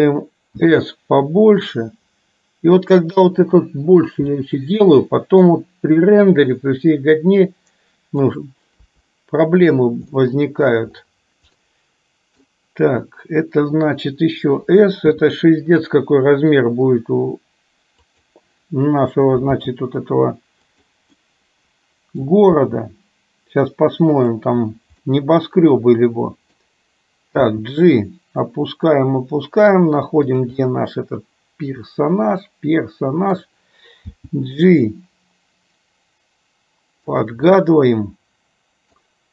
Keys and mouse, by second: 0.6 s, 4.7 middle click, 6.4-8.4 drag, 9.1 KP_3, 10.4 middle click, 11.8 middle click, 15.3 s, 19.7 g, 21.4-22.5 middle drag, 22.8 g, 25.3-26.8 middle drag, 27.4 g, 28.7 middle click, 29.1 middle click, 30.7-33.5 middle drag, 34.3 g, 37.8-39.3 middle drag.